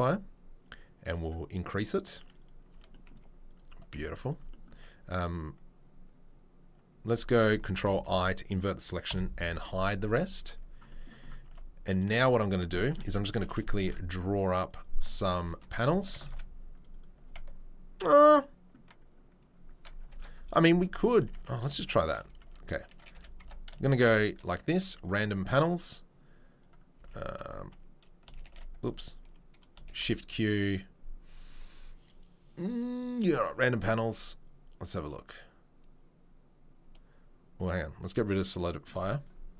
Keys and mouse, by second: 9.1 h, 9.4 z, 11.4 Tab, 12.2 right click, 12.2 z, 12.9 shift+click, 13.1 right click, 13.7 ctrl+click, 13.8 ctrl+r, 13.8-15.0 right drag, 15.2 ctrl+r, 16.2 ctrl+r, 20.1 ctrl+r, 21.1 Tab, 21.1 click, 21.4 Tab, 21.7 shift+right click, 21.8-23.7 drag, 22.2 q, 23.1 a, 23.4 Tab, 23.7 shift+right click, 23.9 shift+q, 24.1-26.4 drag, 26.7-39.2 drag, 26.7 shift+q, 26.9 z, 28.4 shift+a, 29.9 shift+q, 39.2 middle click.